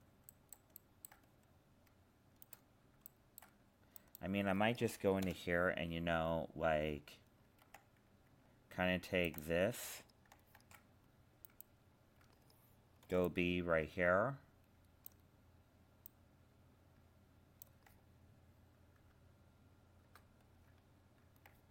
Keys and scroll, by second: 5.2 ctrl+l, 10.5 ctrl+Tab, 19.0 ctrl++.